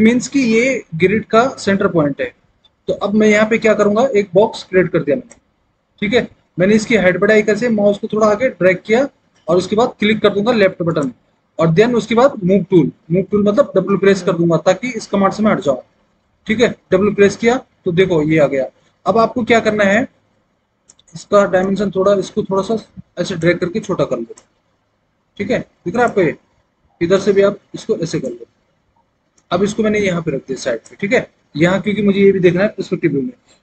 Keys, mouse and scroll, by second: 16.7 w, 24.7 scroll down 1, 27.1 click.